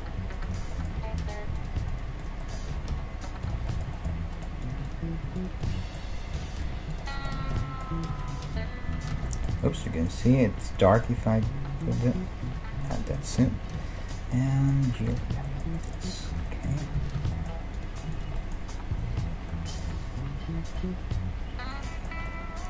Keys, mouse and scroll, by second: 0.4-2.6 right drag, 0.7-2.6 middle drag, 1.0 g, 2.7 g, 4.1 middle click, 6.4 g, 7.4-10.6 middle drag, 7.4 alt+z, 8.1 z, 8.5 z, 9.2 alt+z, 10.8 Tab, 12.6-14.2 drag, 13.2-18.7 middle drag, 13.8 n, 15.2 n, 16.3 Tab, 17.0 z, 17.2 z, 17.8 right click, 19.0 KP_5, 19.7-22.6 middle drag, 19.7 right click.